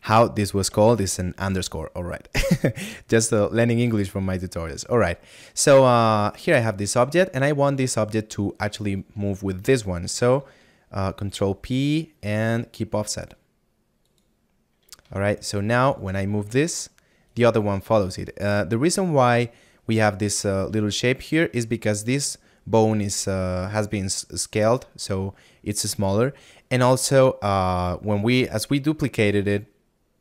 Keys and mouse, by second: 16.0 right click, 21.3 middle click.